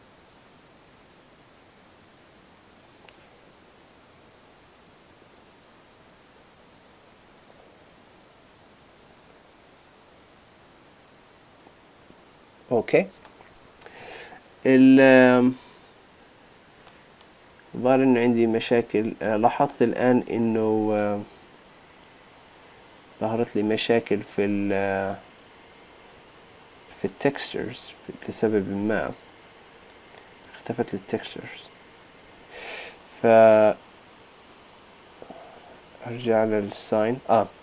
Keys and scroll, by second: 32.4 super+z.